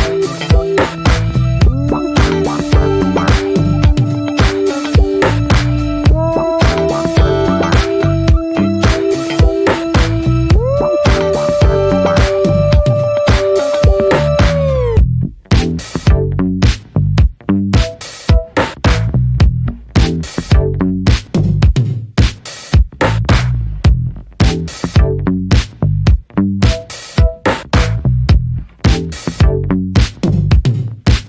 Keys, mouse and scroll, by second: 0.0 scroll up 1, 0.2 middle drag, 0.5 ctrl+s, 0.5 ctrl+click, 0.7-1.5 scroll down 9, 1.2 click, 1.5-2.2 shift+middle drag, 2.2 ctrl+s, 2.4 scroll down 1, 2.6-4.8 shift+middle drag, 4.8 scroll up 1, 5.0-5.4 middle drag, 5.4 ctrl+s, 6.8 shift+middle click, 7.3 click, 7.5 shift+a, 7.6-9.7 shift+middle drag, 9.7 shift+a, 10.4 shift+middle drag, 10.6-11.1 scroll up 2, 11.1 r, 12.7-13.5 scroll down 2, 13.5 click, 14.4 `, 14.9 alt+middle click, 15.2 scroll down 2, 15.3 s, 17.1 alt+middle click, 17.8 s, 19.9 alt+middle click, 21.0-22.0 middle drag, 22.0 s, 23.3 click, 23.5 click, 23.6-24.3 right drag, 24.3-25.6 middle drag, 25.6 click, 26.1-26.7 middle drag, 28.5 click, 28.6 Tab, 28.9-29.2 middle drag, 29.2 scroll up 1, 29.5 click, 29.8-30.2 middle drag, 30.2 shift+click, 30.5-31.2 middle drag.